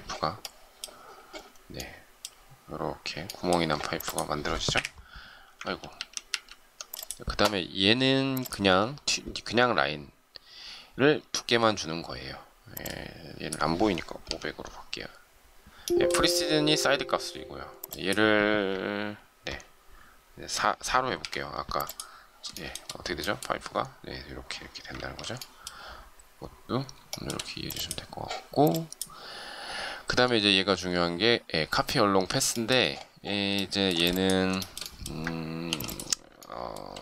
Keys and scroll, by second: 4.5 Delete, 5.6 ctrl+z, 24.9 ctrl+z, 35.6 shift+m.